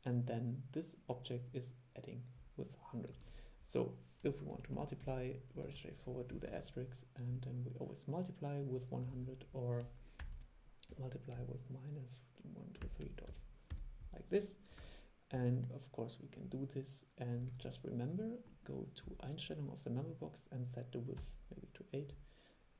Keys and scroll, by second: 3.4 super+e, 6.7 super+e, 9.2 super+e, 14.9 super+e, 17.6 super+e.